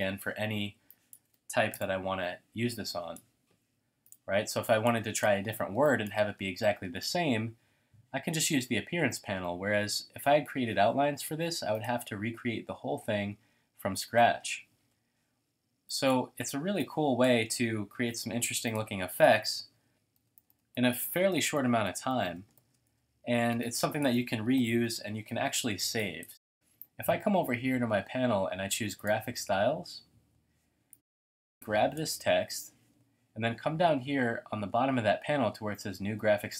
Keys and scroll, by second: 1.7 BackSpace, 5.7 space, 18.2 t, 19.9-24.1 typing, 24.6 super+0, 25.4 shift+super+a, 25.8 space, 26.3 space, 26.5 space.